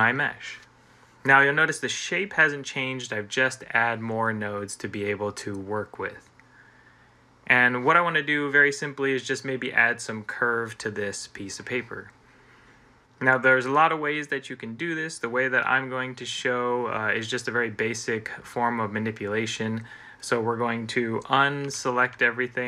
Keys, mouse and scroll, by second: 21.5 a, 22.0 a, 22.5 a.